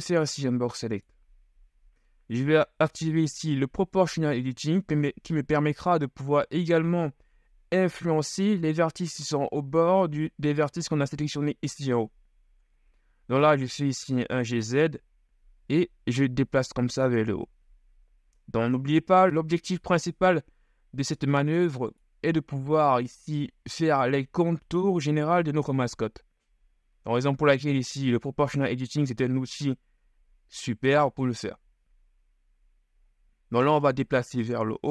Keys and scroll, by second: 0.0 b, 13.7 shift+g, 14.1 shift+z.